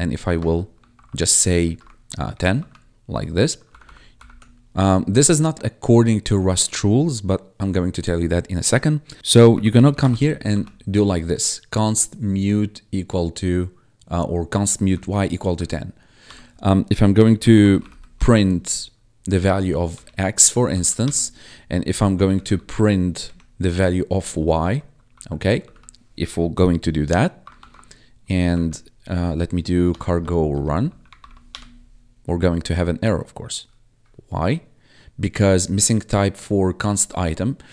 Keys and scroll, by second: 0.0-2.3 typing, 2.5 ctrl+s, 3.6 ctrl+Left, 9.2-10.3 typing, 10.4 ctrl+s, 13.2 Right, 14.8 Left, 16.2 Return, 17.1-18.3 typing, 19.8 Tab, 20.6 ctrl+s, 20.9 Return, 21.9-22.9 typing, 23.2 Tab, 24.5 Right, 25.0 Left, 25.5 ctrl+s, 27.5 ctrl+`, 28.4 Up, 29.8-31.6 typing.